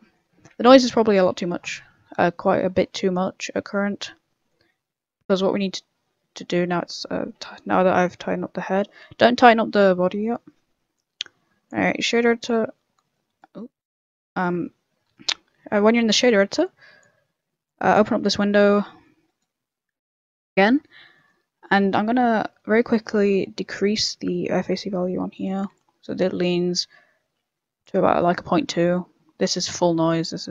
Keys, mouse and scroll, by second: 0.5 a, 0.7 middle click, 0.7 scroll down 3, 1.0 middle click, 1.4 middle click, 1.9 middle click, 2.3 middle click, 2.7 shift+middle click, 2.9 shift+middle click, 2.9 middle click, 5.3 click, 6.5 scroll up 2, 6.5 middle click, 7.1 middle click, 7.5 shift+middle click, 7.6 shift+middle click, 7.8 scroll up 2, 8.0 right click, 8.2 Tab, 8.8 Tab, 9.5-9.9 scroll down 5, 9.9 middle click, 10.2 scroll up 3, 11.1 click, 12.4 click, 16.6 click, 17.6 click, 18.2-19.2 scroll up 9, 18.7 b, 19.2 right click, 19.8 n, 20.0 middle click, 20.4 scroll up 4, 21.1 middle click, 21.6 middle click, 22.2 middle click, 23.1 middle click, 24.5 click, 25.7 click, 28.2 middle click, 28.9 click, 29.6 click.